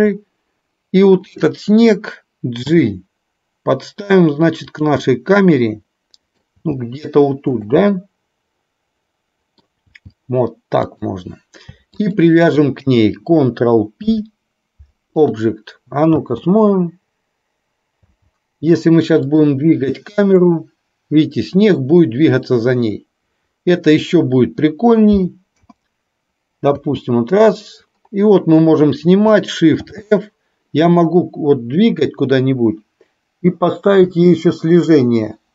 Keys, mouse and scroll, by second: 1.3-1.6 drag, 2.8 g, 5.1-6.5 middle drag, 6.6 g, 7.9-9.8 middle drag, 10.0 g, 12.1 shift+click, 14.0 ctrl+p, 16.3 space, 19.3 click, 19.3 space, 20.6-24.1 drag, 25.6 KP_0, 26.8 space, 29.9 shift+f.